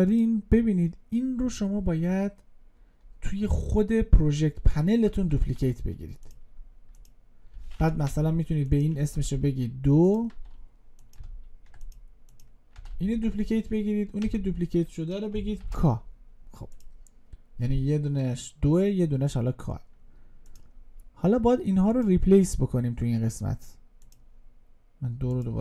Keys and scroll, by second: 5.3 ctrl+d, 12.9 ctrl+d.